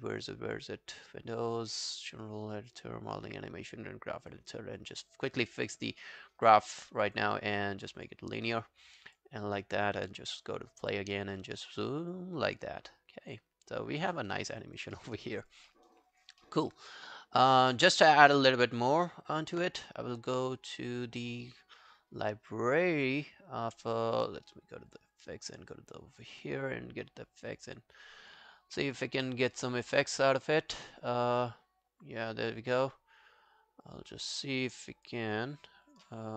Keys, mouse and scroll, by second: 14.3 scroll down 5, 14.6 alt+click, 15.0 alt+middle click, 15.2 alt+right click, 15.4 alt+click, 15.7 alt+middle click, 15.9 alt+right click, 16.1 alt+click, 16.4 alt+middle click, 16.7 alt+right click, 17.0 alt+middle click, 18.1 w, 18.8 alt+click, 28.0 double click, 29.3 right click, 35.5 right click.